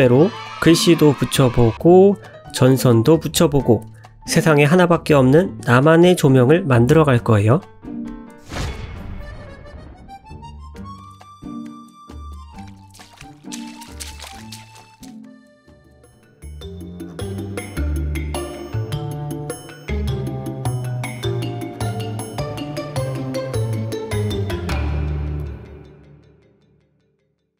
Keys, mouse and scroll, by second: 0.4 click, 0.7 g, 2.0 ctrl+z, 4.2 g, 5.5 ctrl+z, 5.8 click, 6.0 middle click, 8.1-8.4 scroll down 2.